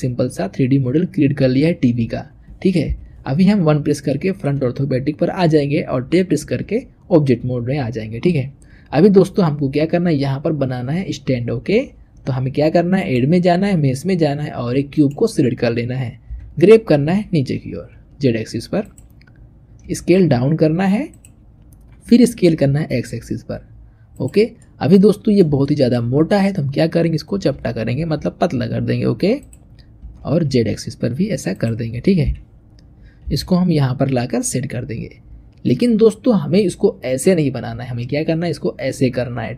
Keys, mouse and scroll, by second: 2.7 KP_1, 3.4-4.0 scroll up 2, 4.0-6.2 shift+middle drag, 6.2 Tab, 12.8-15.9 drag, 16.1 g, 19.7 s, 21.9 s, 24.5-26.0 middle drag, 26.0-27.2 scroll up 2, 27.2 s, 29.9 s, 32.1 KP_1, 33.1 g.